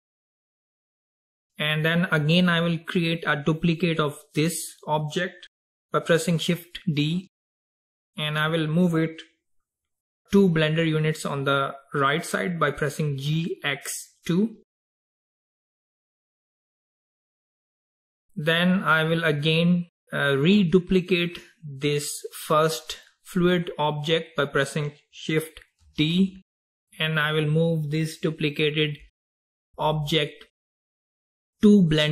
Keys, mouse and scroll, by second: 7.1 shift+d, 14.6 g, 18.0 click, 25.9 shift+d.